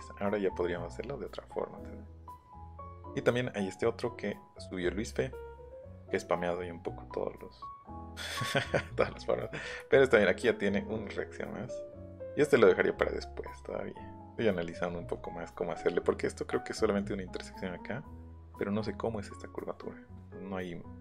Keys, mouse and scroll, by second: 1.8-2.3 scroll down 4, 11.7 middle click, 13.0-14.0 scroll up 4, 20.6-21.0 scroll down 3.